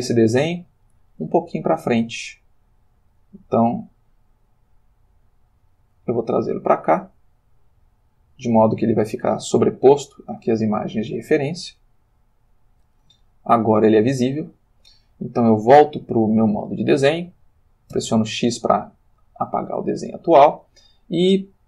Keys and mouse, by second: 0.2 ctrl+middle click, 1.1-3.3 ctrl+middle drag, 4.1-6.1 drag, 6.5-8.7 middle drag, 8.9-11.0 middle drag, 12.1 click, 13.2 ctrl+middle click, 15.6 click, 16.6 click, 17.9 x, 19.1 click, 20.0-21.6 shift+middle drag.